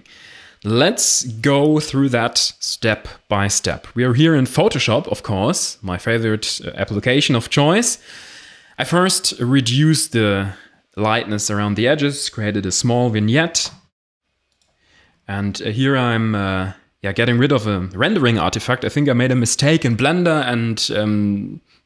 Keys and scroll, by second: 11.6 d.